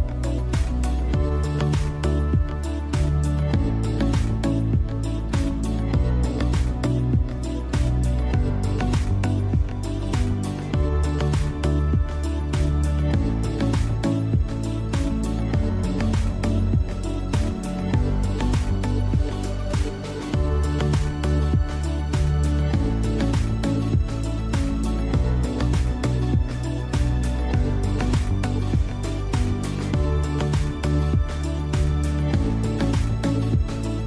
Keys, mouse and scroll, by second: 1.3-2.4 scroll down 1, 2.4 click, 4.9 scroll up 1, 5.9 click, 9.4 click, 25.8 click, 28.9-29.7 scroll up 1, 29.8 ctrl+space, 30.1 ctrl+click, 30.4 ctrl+space, 30.8 ctrl+click, 33.7-34.0 drag.